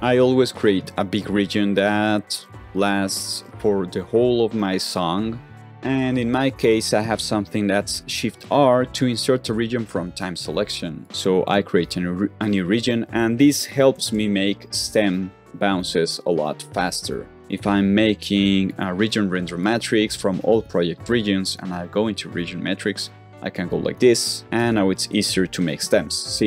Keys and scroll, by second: 5.5 shift+', 7.1 shift+r, 11.4 shift+r, 13.8 alt+super+r.